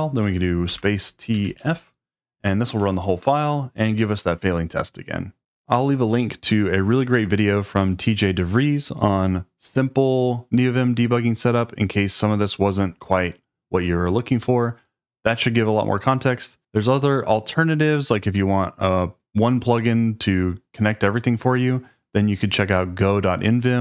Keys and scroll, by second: 0.7 space, 1.3 t, 1.6 f.